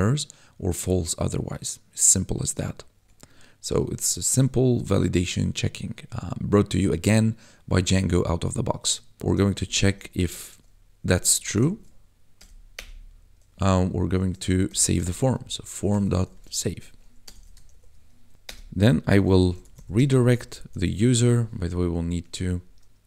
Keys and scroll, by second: 2.9 Tab, 9.2 shift+9, 9.9 Right, 10.4 shift+', 11.3 BackSpace, 11.6 shift+;, 12.3 BackSpace, 12.7 Return, 14.4-16.2 typing, 17.2 BackSpace, 17.7 shift+0, 18.3 ctrl+s, 18.4 Return, 19.1-21.2 typing, 22.2 Escape, 22.3 Up.